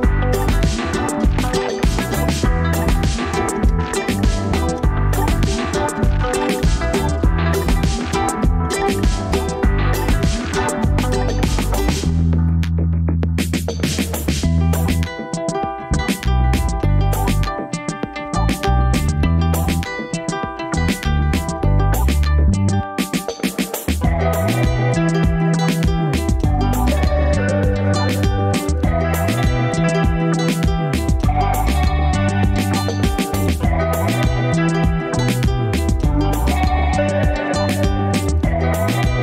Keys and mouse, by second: 0.1 ctrl+KP_Add, 3.3 KP_Add, 5.7 ctrl+KP_Subtract, 7.1 s, 14.8 ctrl+r, 25.1 ctrl+r, 30.7 middle click, 31.0 Tab, 31.6 middle click, 32.4 ctrl+s, 34.3 click.